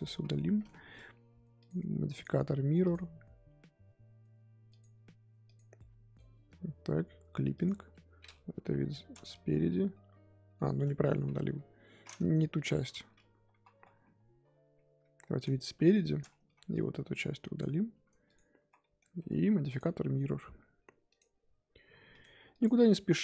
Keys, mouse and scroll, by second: 0.4 middle click, 0.8 Tab, 1.6 click, 5.4 click, 7.5 click, 8.5 KP_1, 9.3 Tab, 9.7-11.2 middle drag, 11.2-11.6 scroll down 1, 11.6 KP_7, 13.1 ctrl+z, 13.3-14.6 ctrl+z, 15.6 KP_1, 16.3 scroll up 2, 16.4 z, 16.7-18.7 drag, 18.7 scroll down 1, 18.8 middle click, 19.2 Tab, 22.1 click, 22.5 click.